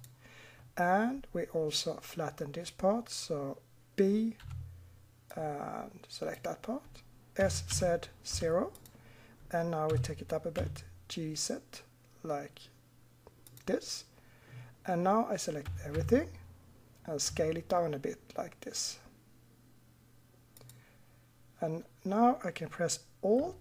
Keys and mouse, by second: 4.4 b, 7.4 s, 9.9 g, 15.6 a, 16.0 a, 17.3 s.